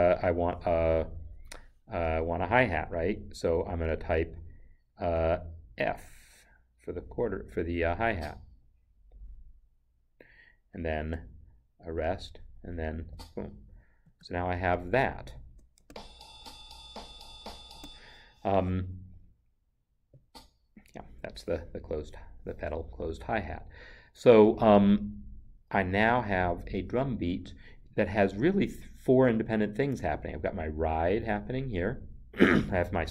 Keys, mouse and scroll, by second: 1.1 0, 8.0 f, 11.9 0, 13.0 f, 14.0 Escape, 15.3 click, 15.8 space, 17.7 space, 20.1 space, 26.5 click.